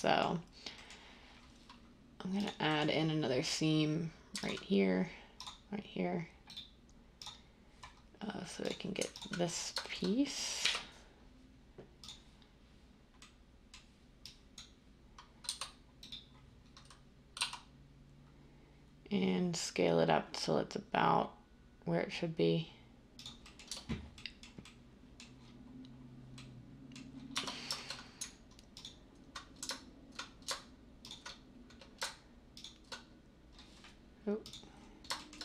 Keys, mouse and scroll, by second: 10.6 u, 15.4 a, 17.3 s, 23.7 Tab, 27.3 Tab.